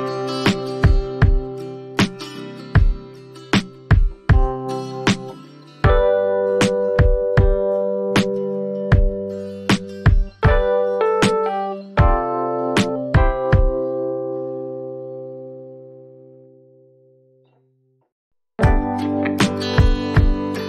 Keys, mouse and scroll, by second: 1.2 click, 2.6 click, 11.9 click, 14.5 click, 16.0 ctrl+t, 19.1 shift+click.